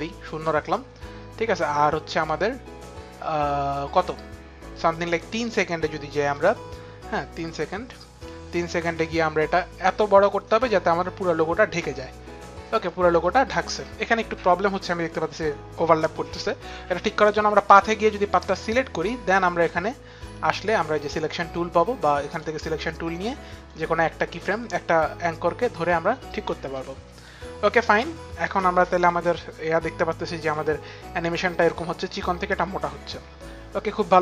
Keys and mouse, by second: 11.8 click, 16.9 click, 17.6 click, 19.3 click, 22.0 click, 22.8 click, 24.1 click, 26.8 click, 28.8 click.